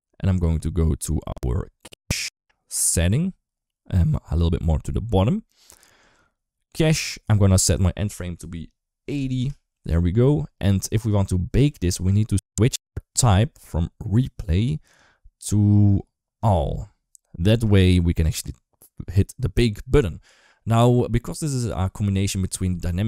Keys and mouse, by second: 7.4-13.9 drag, 14.7-16.6 drag, 21.6 click, 22.3 right click, 22.7 ctrl+s.